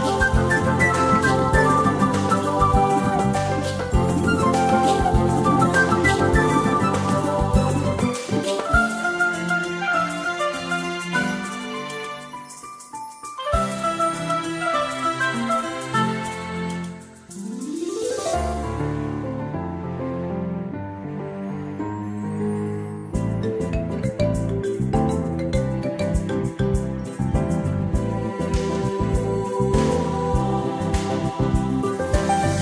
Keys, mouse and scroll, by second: 5.2 click, 8.3 click, 27.4 ctrl+scroll down 1, 28.2 scroll down 1, 28.3 space, 29.0 ctrl+scroll up 1, 29.7 click.